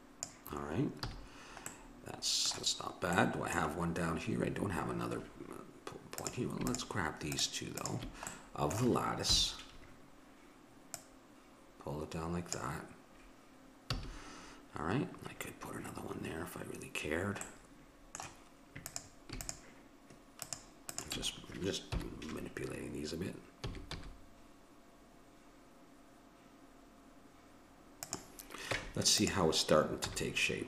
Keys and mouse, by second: 1.1 a, 6.2-9.4 drag, 8.3-9.3 middle drag, 9.3 KP_7, 11.0-12.7 drag, 13.8 a, 17.6-18.9 middle drag, 18.9-22.1 drag, 21.9 KP_7, 23.6 s, 28.8 Tab, 30.0 z.